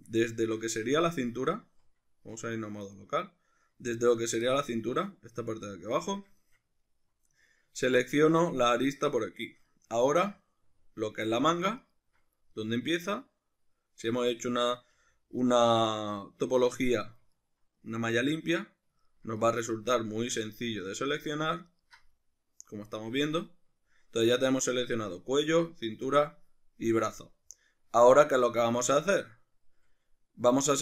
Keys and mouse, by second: 1.0 z, 2.4 \, 4.0 alt+right click, 4.5-11.8 middle drag, 11.8 alt+shift+right click, 12.6-15.4 middle drag, 15.4 alt+shift+right click, 15.9-21.7 middle drag, 21.7 alt+shift+right click, 22.1-30.8 middle drag.